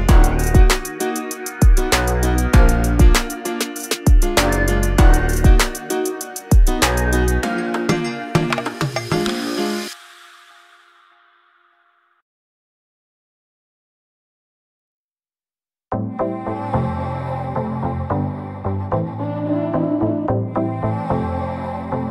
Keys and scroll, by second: 1.2 l, 5.3 space, 7.5 p, 8.1 space, 9.7 m, 11.0 2, 11.2 0, 11.5 Return, 11.8 space, 12.2 p, 13.3-14.3 typing, 16.6-18.2 typing, 19.5 m, 21.4 Right.